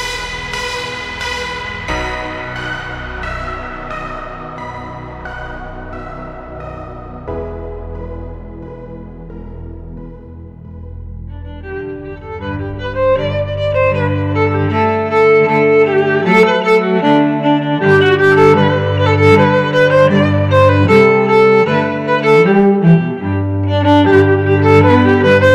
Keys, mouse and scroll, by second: 4.9 click, 5.8 shift+a, 11.8 shift+s, 15.3 shift+a, 23.7 n.